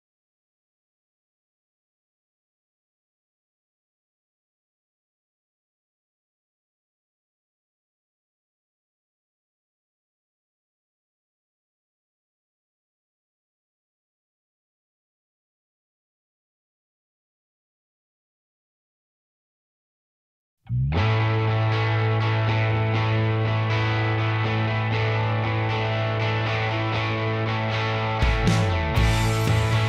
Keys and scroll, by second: 0.9 Escape, 1.3 ctrl+a, 1.9 ctrl+h, 21.8 ctrl+z, 22.7 Escape, 23.5 ctrl+h, 25.5 ctrl+h, 27.2 ctrl+h, 28.6 i.